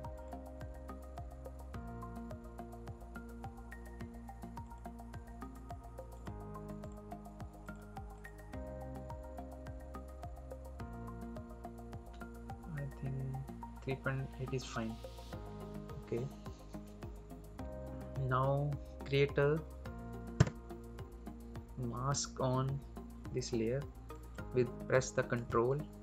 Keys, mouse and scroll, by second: 4.5 click, 14.7 click, 20.2 d.